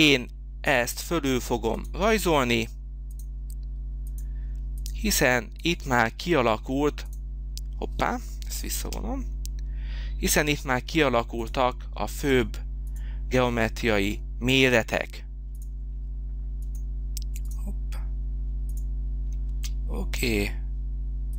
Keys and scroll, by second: 8.7 ctrl+z, 19.4 space.